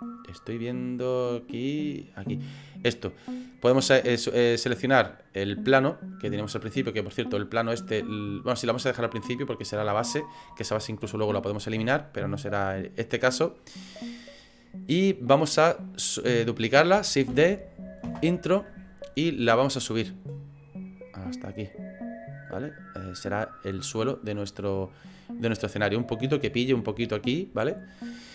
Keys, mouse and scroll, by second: 2.4 right click, 3.0 middle click, 7.6 click, 17.3 shift+d, 19.6 click, 22.5 middle click, 24.6 middle click, 26.1 scroll up 4, 26.6 shift+middle click, 27.9 scroll down 1, 28.0-28.3 scroll down 7.